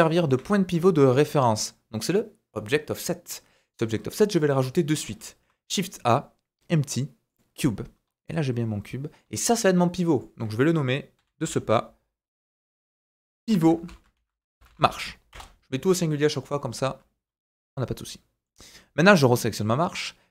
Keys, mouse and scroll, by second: 0.5-0.8 scroll up 2, 5.1 shift+a, 8.1 scroll down 1, 10.1-19.1 drag, 17.7 middle click, 19.1-20.3 middle drag.